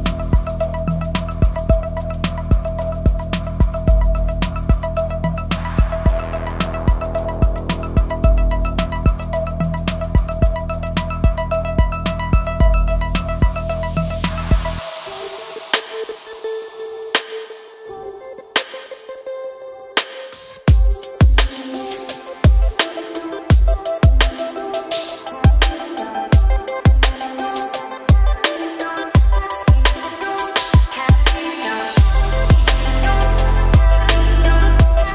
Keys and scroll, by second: 2.5 ctrl+r, 9.1 ctrl+r, 20.4 ctrl+r, 22.9 ctrl+r, 29.4 ctrl+r.